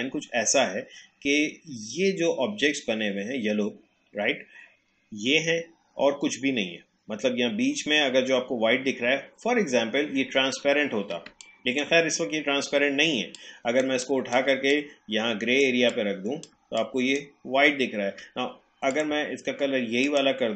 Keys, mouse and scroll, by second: 10.7 alt+scroll down 1, 11.3 space, 11.4 click, 11.8 space, 13.3 click, 13.9 space, 14.0 click, 14.4 space, 14.7 click, 15.6 space, 15.9 click, 16.2 space, 16.8-20.5 drag.